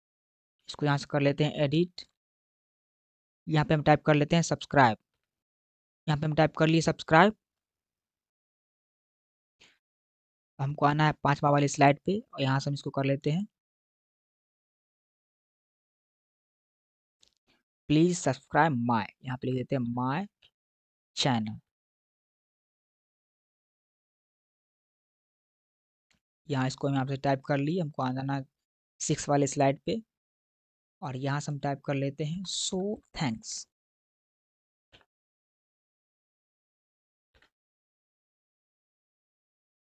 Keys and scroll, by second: 1.3 BackSpace, 5.0 s, 15.6 BackSpace, 19.3-20.3 typing, 21.6-24.9 typing, 32.2 BackSpace, 34.1-35.2 typing, 36.4-39.6 typing.